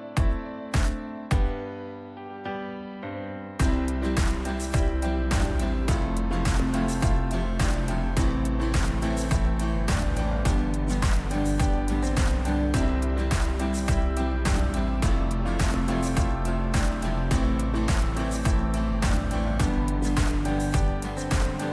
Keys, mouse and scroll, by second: 8.8 click, 12.8-15.1 drag, 14.5 right click, 15.9 right click, 16.5 click, 20.6 click.